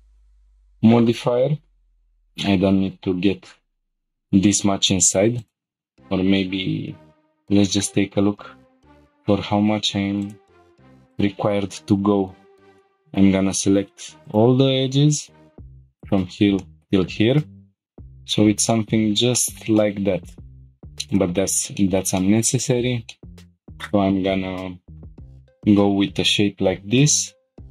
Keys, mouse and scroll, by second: 0.1 scroll down 1, 2.0 shift+middle click, 2.0 scroll up 1, 5.4 click, 7.0 g, 10.2 shift+click, 11.1 click, 12.7 shift+middle click, 12.8 click, 12.8 middle click, 14.2 click, 16.0 ctrl+click, 16.6 shift+middle click, 17.9 shift+click, 17.9 shift+g, 18.3 scroll down 1, 18.7 middle click, 19.3 shift+middle click, 19.8 middle click, 20.6 g, 21.1 click, 21.8 shift+middle click, 22.2 middle click, 22.7 scroll up 1, 23.1 shift+middle click, 23.4 scroll up 1.